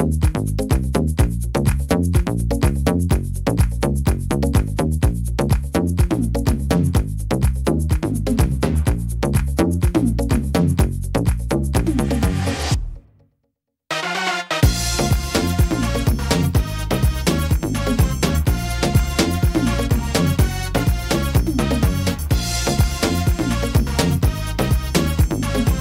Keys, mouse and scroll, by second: 1.4 middle click, 2.2 click, 3.7 middle click, 4.7 scroll down 2, 5.1 middle click, 5.4 scroll down 2, 5.8 middle click, 6.5 middle click, 7.1 scroll up 1, 8.0-9.0 scroll up 4, 8.1 shift+middle click, 8.1 shift+middle click, 8.9 middle click, 9.2-9.6 scroll down 5, 10.2 a, 11.4 s, 13.4 middle click, 15.6 scroll up 1, 17.2 s, 20.4 ctrl+z, 21.5 alt+s, 24.9 middle click, 25.5-25.8 scroll up 6.